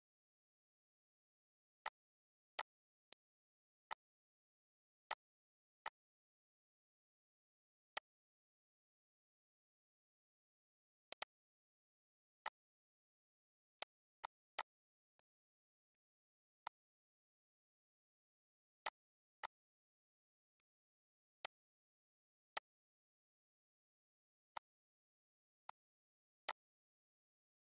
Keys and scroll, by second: 4.4 c.